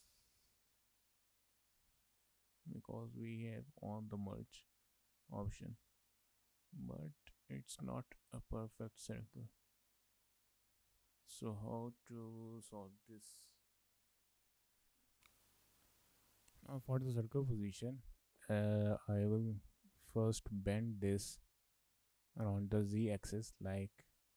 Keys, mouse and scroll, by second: 0.0 middle click, 1.9 scroll down 2, 2.1 shift+middle click, 2.4 middle click, 4.6 shift+middle click, 4.9 middle click, 5.8 shift+middle click, 6.0 middle click, 7.1 shift+middle click, 7.6 middle click, 9.3 middle click, 10.0 scroll down 2, 10.3 shift+middle click, 10.6 middle click, 15.2 shift+middle click, 15.2 middle click, 16.2 shift+middle click, 16.3 middle click, 18.2 middle click, 19.3 shift+middle click, 19.6 middle click, 20.1 scroll down 1, 20.3 scroll up 1, 20.6 shift+middle click, 20.9 middle click, 21.2-21.6 scroll up 2, 21.6 shift+middle click, 21.8 middle click.